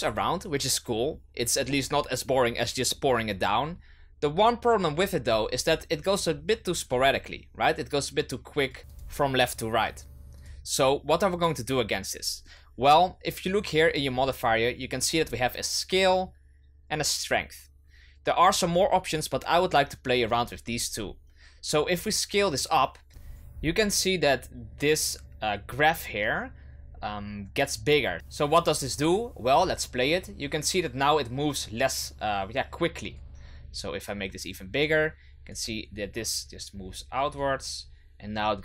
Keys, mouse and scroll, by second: 6.8 click, 8.9-13.4 drag, 21.9-23.1 drag, 23.1-25.7 scroll down 5, 28.1-32.5 drag, 33.1-37.1 drag, 37.4-38.6 drag.